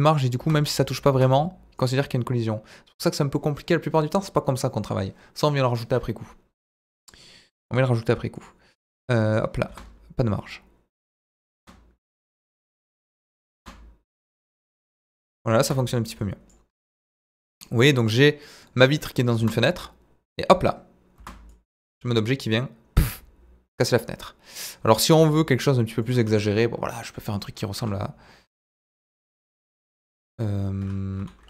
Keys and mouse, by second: 0.4 space, 1.1 space, 8.3 click, 9.2 click, 9.7 space, 11.6 space, 12.3 click, 12.7 s, 13.4 click, 13.6 space, 15.6 space, 16.2 drag, 17.0-17.3 middle drag, 17.6 middle drag, 18.0 click, 18.2-18.7 middle drag, 19.0 middle drag, 19.4 space, 21.2 space, 21.5-23.7 drag, 24.2-24.5 middle drag, 25.2 s, 26.0 click, 27.8 ctrl+a, 29.5 click, 30.8 Tab, 31.2 a.